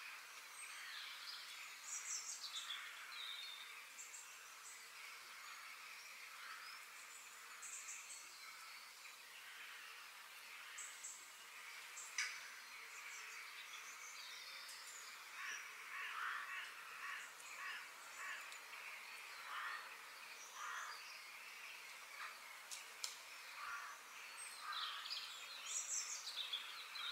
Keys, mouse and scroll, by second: 0.0-2.9 shift+middle drag, 4.2 f, 8.0 g, 9.1 shift+d, 15.0 shift+middle click, 15.6-16.7 scroll down 3, 16.7 shift+middle click, 17.5 shift+d, 19.0 shift+d, 20.5 shift+d, 22.9 shift+click, 23.4 shift+click, 24.0 shift+click, 24.6 shift+click, 25.4 ctrl+j.